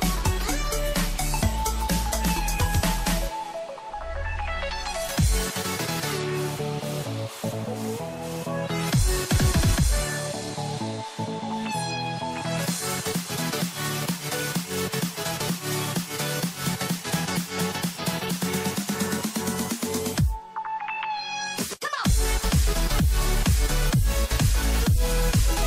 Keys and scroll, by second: 1.8 ctrl+alt+z, 11.4 ctrl+0, 12.1 ctrl+-, 12.4 ctrl+=, 14.7 ctrl+-, 16.1 ctrl+shift+n, 17.5 ctrl+t, 25.2 ctrl+shift+n.